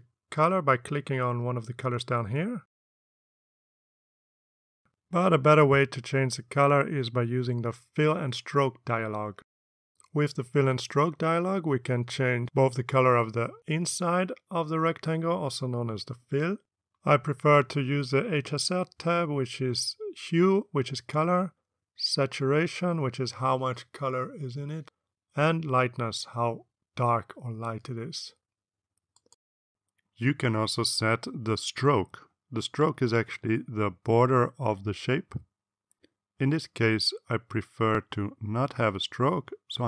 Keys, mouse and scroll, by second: 0.6 click, 3.2 click, 3.9 click, 4.7 click, 9.1 click, 17.8-20.9 drag, 23.0-26.6 drag, 30.2 click, 32.1 click, 39.3 click.